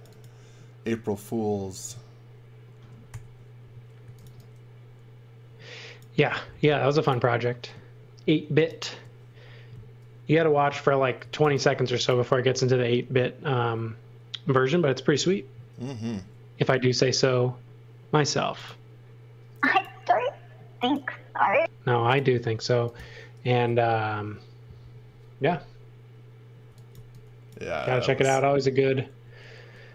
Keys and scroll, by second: 3.1-4.7 typing, 6.5 m, 10.9-11.9 typing, 13.6 space, 16.1 l, 26.4-28.2 typing, 29.2 l.